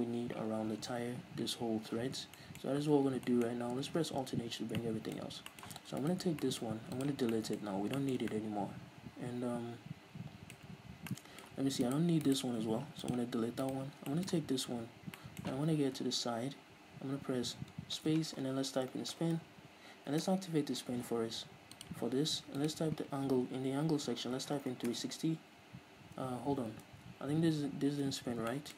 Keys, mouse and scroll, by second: 1.0 scroll down 1, 2.4 middle click, 2.7 scroll up 1, 3.0 ctrl+s, 3.3 middle click, 4.6 alt+h, 4.8-6.1 middle drag, 5.3 scroll up 2, 6.1 right click, 6.5-11.9 middle drag, 6.9 x, 7.7-8.0 scroll up 2, 11.9-12.9 right drag, 12.9 x, 13.7 right click, 14.0 scroll down 2, 14.2-18.0 middle drag, 14.4 Tab, 16.0 KP_3, 18.0 space, 20.3-21.8 middle drag, 20.4 Return, 21.8-28.7 drag, 25.1 Return, 26.9 ctrl+z, 27.8-28.7 scroll up 2.